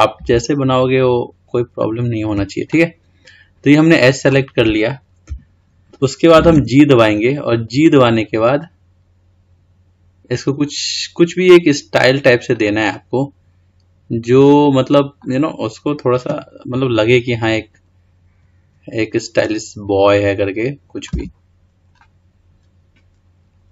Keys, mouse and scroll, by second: 1.1 ctrl+click, 2.9-4.4 middle drag, 4.4-5.4 scroll down 3, 5.4 KP_1, 6.7 g, 13.1-16.1 middle drag, 18.6 g, 21.3 Tab, 22.2-23.7 middle drag.